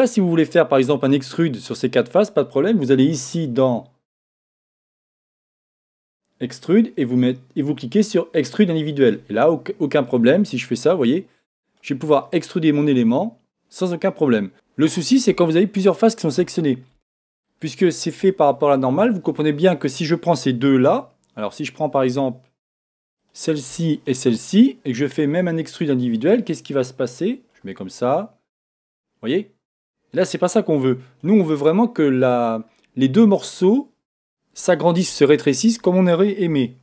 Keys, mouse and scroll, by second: 6.0-10.3 drag, 12.3-23.2 middle drag, 18.4 scroll up 1, 23.2 click, 23.9 shift+click, 26.2-28.2 drag.